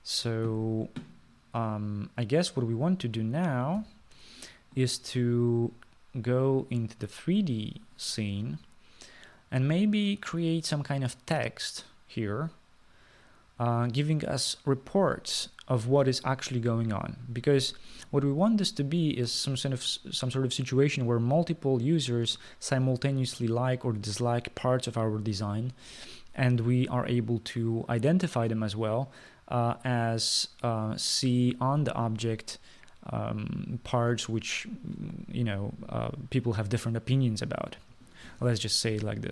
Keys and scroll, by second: 4.9 ctrl+s.